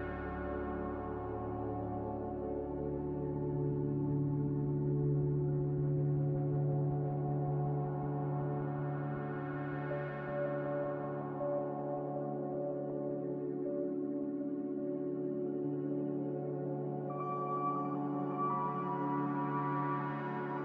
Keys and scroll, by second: 3.4 2, 3.5 5, 3.6 Return, 9.6 c.